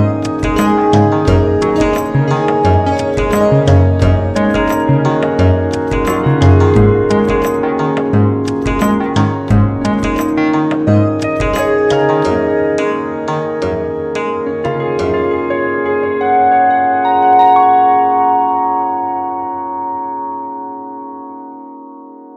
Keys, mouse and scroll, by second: 0.2 e, 5.4 r, 10.0 s, 13.4 r, 21.9-22.3 right drag.